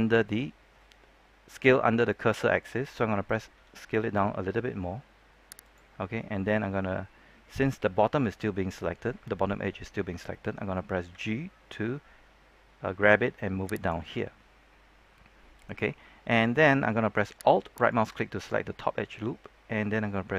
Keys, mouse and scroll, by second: 3.5 s, 5.6 click, 11.0 g, 13.7 click, 17.7 alt+right click.